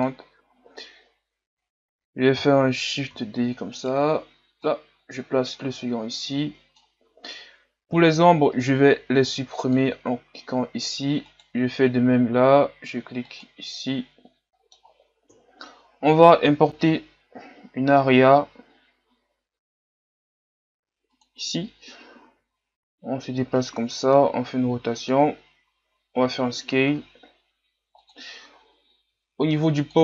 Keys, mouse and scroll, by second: 3.3 shift+d, 4.8-8.0 drag, 8.0 scroll down 3, 9.7-11.5 drag, 11.5-13.4 right drag, 13.4-14.5 drag, 14.5 middle click, 15.3 KP_3, 16.3-16.6 scroll down 3, 16.7 shift+a, 22.5 g, 23.9 r, 26.3 s.